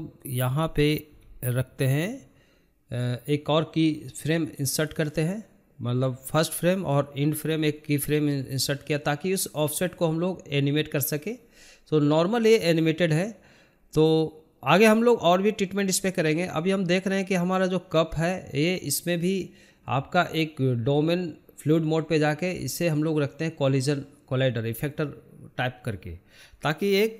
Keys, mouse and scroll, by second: 2.9-4.8 right drag, 5.1-6.3 drag, 6.3 space, 12.2-14.0 drag, 14.0 middle click, 14.5 scroll up 3, 14.8 scroll down 1, 14.9-15.8 middle drag, 15.8 click, 16.2 middle click, 16.3-20.2 drag, 26.5 click.